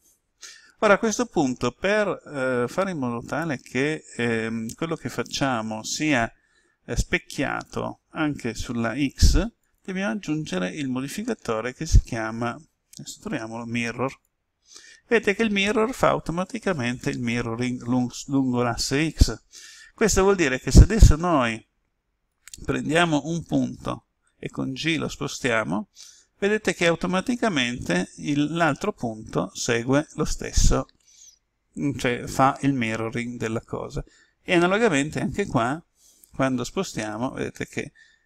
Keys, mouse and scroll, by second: 22.3 right click, 24.2 g, 33.4 click, 35.1 right click, 36.2 g.